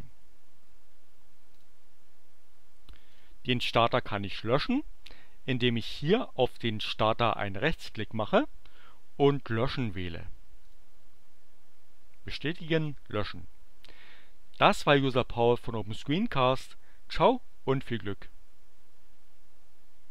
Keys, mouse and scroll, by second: 1.5 click, 3.1 click, 7.6 right click, 10.7 click, 12.7 click.